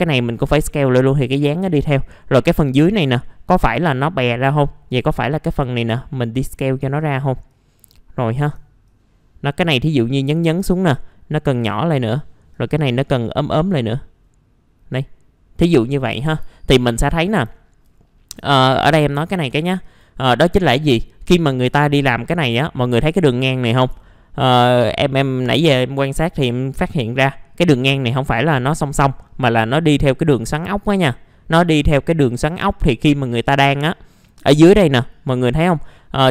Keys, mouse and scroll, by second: 1.7 middle click, 4.5-7.2 drag, 8.1 scroll up 1, 8.8-10.5 drag, 10.5 r, 10.9 click, 12.1 middle click, 12.5 click, 14.2-15.9 drag, 15.9 scroll down 1, 16.5 alt+middle click, 17.5 alt+middle click, 18.5 alt+middle click, 19.1 click, 20.7 middle click, 21.2 click, 21.8 alt+middle click, 22.3-23.9 scroll up 1, 24.2 alt+middle click, 25.1 scroll down 1, 25.7 middle click, 26.5 scroll up 1, 26.9 alt+middle click.